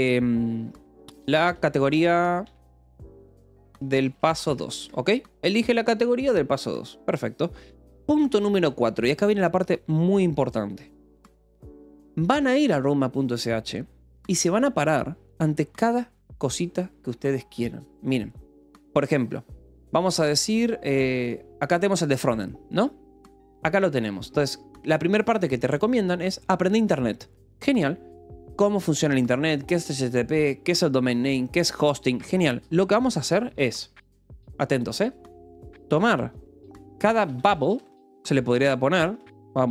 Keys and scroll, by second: 0.6-5.0 typing, 6.8 o, 7.7 4, 8.1 -, 8.4 space, 36.6-38.1 typing, 39.1-39.7 typing.